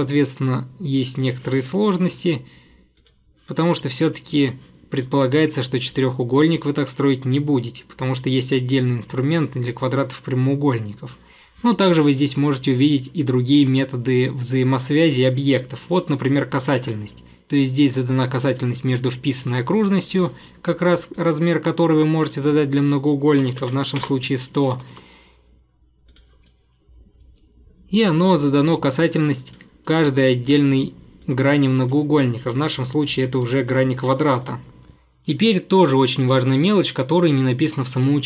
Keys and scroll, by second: 2.1 Escape, 2.3 Escape, 23.2-24.9 typing, 24.8 Escape, 24.9 Escape.